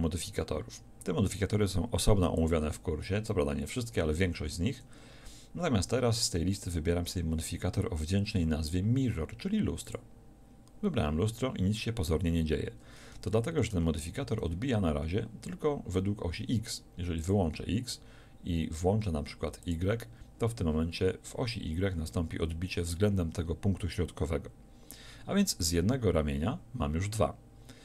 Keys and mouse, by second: 10.0-14.8 middle drag.